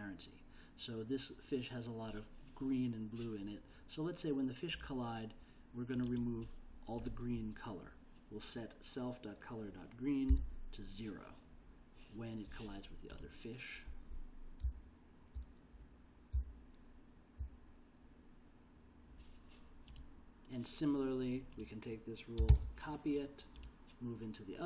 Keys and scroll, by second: 10.4 0, 14.8 d, 16.5 l, 22.6 super+c.